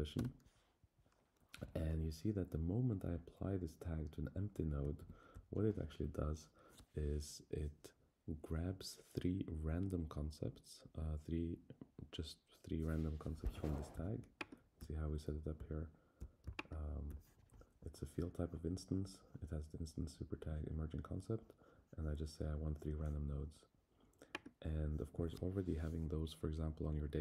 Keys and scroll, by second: 0.1 Return, 5.0 super+Down.